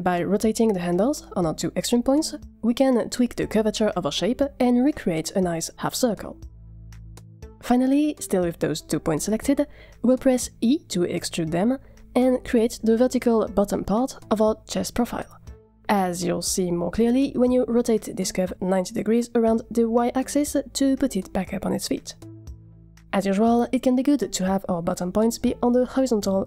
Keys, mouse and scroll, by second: 0.1 click, 0.7 click, 1.1 scroll up 3, 1.2 shift+middle click, 1.8 shift+middle click, 3.4 r, 4.7 click, 5.0 r, 8.9 click, 10.9 e, 12.4 g, 14.2 Tab, 16.4-17.1 middle drag, 17.2-17.7 scroll down 4, 17.7-18.0 middle drag, 19.3 r, 24.2 scroll up 2, 24.4-24.8 middle drag, 25.4 click, 26.2 Tab.